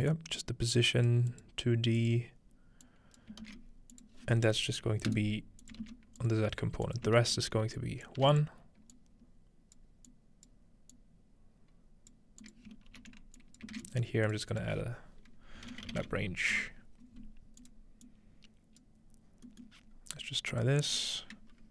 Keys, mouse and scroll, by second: 0.4 click, 1.3 click, 2.0 click, 2.9 click, 3.4 shift+a, 3.7-6.1 drag, 5.1 right click, 5.8 shift+d, 6.2 click, 6.9-8.5 ctrl+shift+drag, 7.2 ctrl+shift+h, 8.2 1, 9.0-10.5 drag, 10.9-12.1 drag, 12.4 click, 12.9 ctrl+h, 13.1-14.3 typing, 13.4 click, 13.8 shift+click, 14.3 click, 14.5 click, 15.6-17.1 typing, 17.6 click, 18.1 click, 19.8-21.7 scroll up 2, 20.5 click.